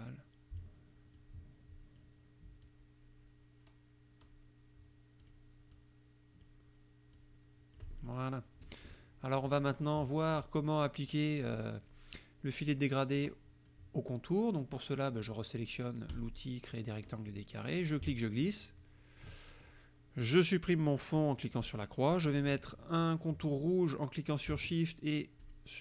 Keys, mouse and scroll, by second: 1.2 click, 2.7 click, 3.7-4.5 scroll down 2, 5.2 click, 5.7 click, 7.2 click, 8.0 click, 8.6 F1, 9.0-10.2 drag, 10.4 click, 11.1 click, 16.2 click, 16.7 click, 17.8-19.4 ctrl+drag, 21.6 click, 25.5 shift+click.